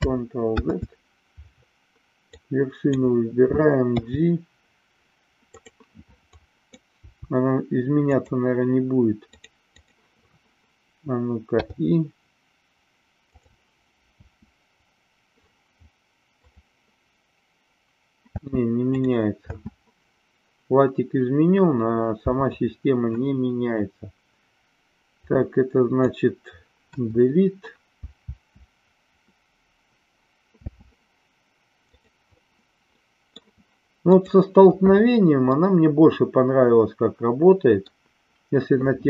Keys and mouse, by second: 0.4 ctrl+z, 2.4 click, 3.9 g, 5.5 click, 6.3 click, 7.1 g, 7.9 click, 9.4 click, 14.2 space, 16.4 click, 18.3 space, 18.9 click, 25.2 click, 26.8 Delete, 28.3 space, 30.7 space, 31.9 click, 32.8 middle click, 34.1 click, 35.5-37.8 middle drag.